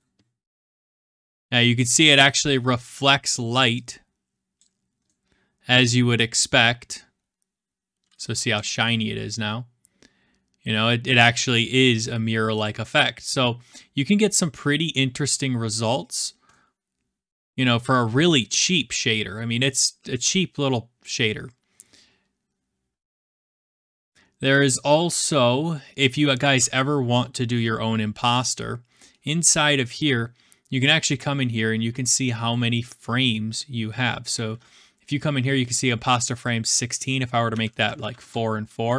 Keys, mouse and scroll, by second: 0.2-1.3 middle drag, 3.2 click, 4.9 click, 5.8-6.2 drag, 8.1-8.5 scroll, 9.0-10.3 middle drag, 9.0-10.0 scroll up 1, 10.0 scroll up 1, 10.2 scroll, 10.3 scroll up 1, 11.1-12.2 scroll, 12.6 click, 13.0 click, 15.2-16.0 scroll, 16.0 scroll, 16.5-17.1 scroll down 11, 17.4 scroll, 18.0-18.5 scroll down 3, 19.2 scroll, 19.8 scroll, 21.5 scroll, 22.5 scroll, 23.6 scroll, 24.5-26.3 scroll, 28.3-29.5 drag, 29.8-30.9 middle drag, 35.7-36.7 drag, 37.5-37.9 typing, 37.8 Tab, 38.1 Return.